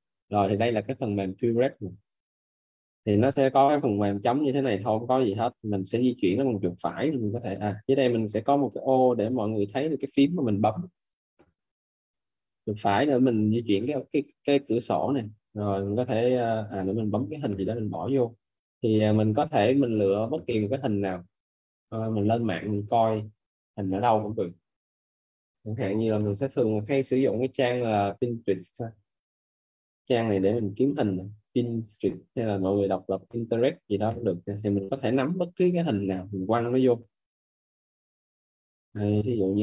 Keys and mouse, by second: 2.2 right click, 8.3 right click, 13.1 right click, 19.3 click, 23.1 click, 25.1 p, 25.4 n, 26.4 KP_Enter, 28.2 click.